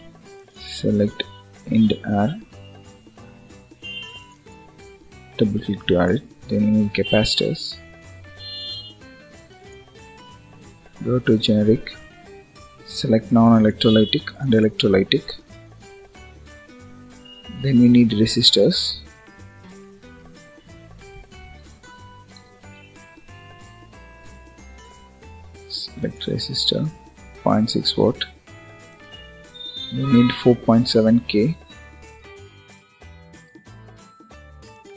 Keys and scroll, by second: 21.5 BackSpace.